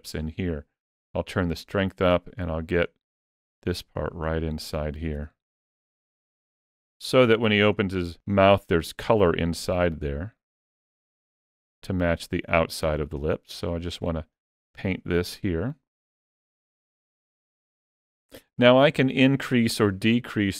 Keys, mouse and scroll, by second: 0.9 click, 2.2 click, 2.7 click, 3.2 click, 3.7 click, 4.1 click, 4.9 f, 6.5 click, 6.9 click, 7.2 click, 7.6 click, 9.1 click, 9.5 click, 10.1 click, 10.7 click, 12.2 click, 12.6 click, 13.0 click, 13.4 click, 13.8 click, 14.2 click, 14.6 click, 14.9 click, 17.1 click, 17.5 click, 18.1 click, 19.9 ctrl+middle click.